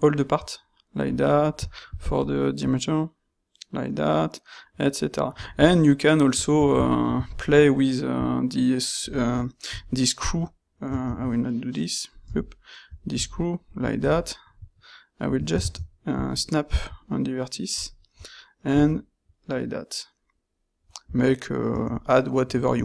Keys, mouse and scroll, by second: 9.8 e, 11.2 ctrl+z, 12.2 e, 18.9 e.